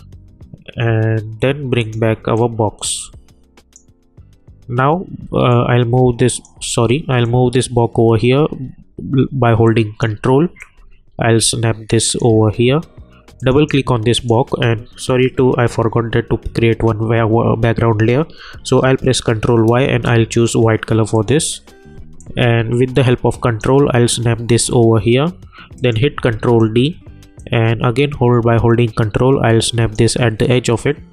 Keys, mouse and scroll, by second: 1.8-6.7 drag, 6.7 ctrl+z, 7.2-10.6 drag, 10.6-13.4 drag, 19.0 ctrl+y, 19.9 Return, 21.1-25.7 drag, 26.2 ctrl+d, 27.6-30.2 ctrl+drag.